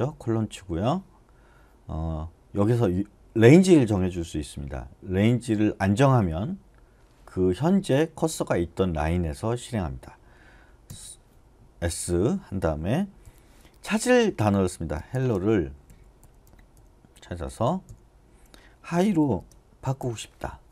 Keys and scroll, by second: 10.8 s, 13.2 /, 15.1-20.0 typing.